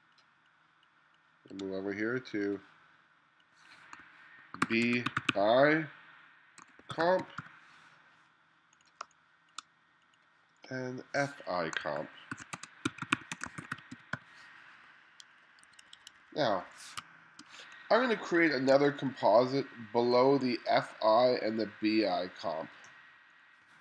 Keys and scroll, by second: 4.4-7.9 typing, 9.1 space, 12.4-14.7 typing, 15.7 1, 17.0 space, 18.2 2, 18.8 1.